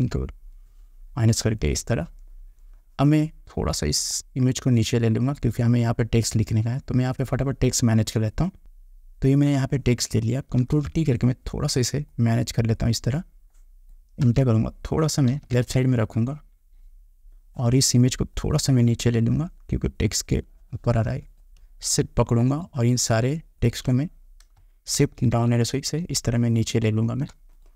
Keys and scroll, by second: 14.4 Return, 25.2 shift+Down.